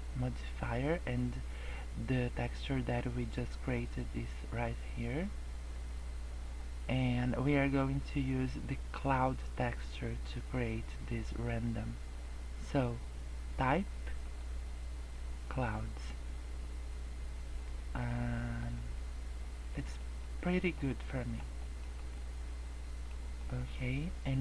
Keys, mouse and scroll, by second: 14.2 click, 16.0 middle click, 18.6-18.9 scroll up 2, 18.9 middle click, 19.8 scroll down 2, 19.9 middle click, 20.2 scroll up 3, 20.5 middle click, 20.8 scroll down 4, 21.0 middle click, 21.5 middle click, 21.8 scroll up 2, 22.0 middle click, 23.2 scroll down 1, 23.3 middle click.